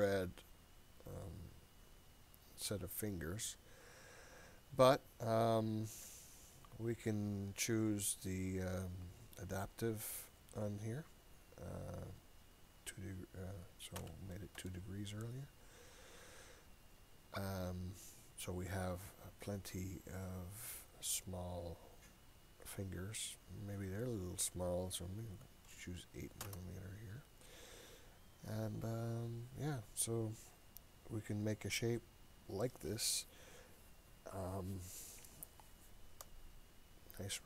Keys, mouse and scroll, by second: 9.1-17.0 drag, 23.7-36.4 drag.